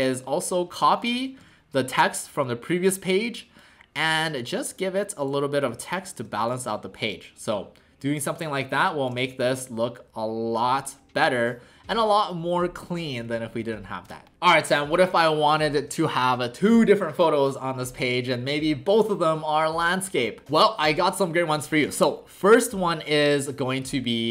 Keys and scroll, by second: 1.4 alt+w, 6.5 shift+w.